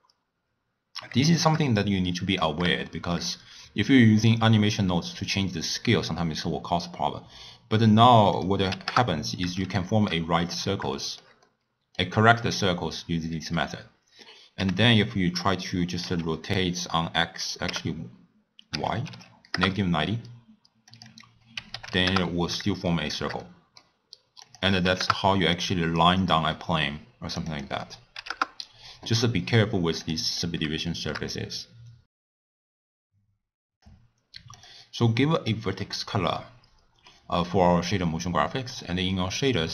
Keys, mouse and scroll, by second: 0.8-1.3 scroll down 3, 1.3-2.2 shift+middle drag, 2.2-2.8 scroll up 1, 2.8-5.9 shift+middle drag, 8.4-9.6 drag, 9.6-10.3 shift+middle drag, 10.3-10.9 scroll down 2, 10.9-14.4 shift+middle drag, 14.6 r, 20.8-22.8 drag, 22.8-24.4 shift+middle drag, 24.4-30.5 drag, 30.9-32.4 shift+middle drag, 32.6 click, 32.9 Tab, 33.0 Tab, 33.4 click, 33.6 click, 34.5 click, 35.3 click, 37.0-38.6 middle drag, 38.6 click.